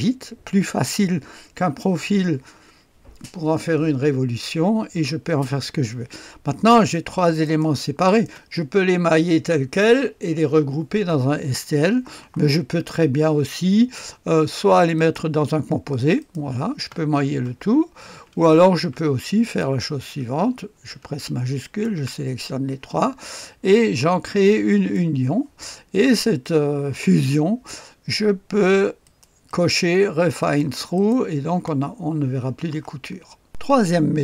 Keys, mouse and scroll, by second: 6.7 click, 7.4-8.8 ctrl+drag, 14.9 click, 16.2 click, 16.8 space, 17.4 space, 18.7 ctrl+z, 19.4 ctrl+click, 21.6 shift+click, 24.7 click, 26.1 click, 29.0-30.0 drag, 30.4-31.5 drag, 33.5 click.